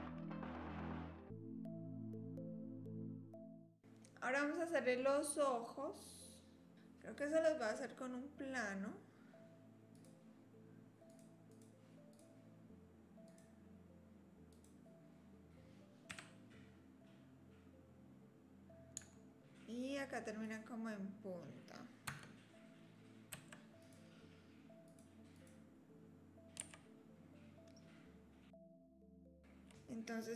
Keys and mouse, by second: 0.0-1.1 typing, 0.8 click, 1.4 click, 1.5 middle click, 1.7 middle click, 1.9 click, 2.6 middle click, 2.8 shift+d, 3.1 click, 3.3 s, 3.6 KP_3, 6.7-7.8 drag, 9.9 click, 11.1 click, 11.5 click, 12.1 click, 13.4-14.6 drag, 16.1 KP_7, 20.4 click, 22.1 Tab, 23.3 2, 23.8 click, 25.3 click, 26.6 s, 29.1 click.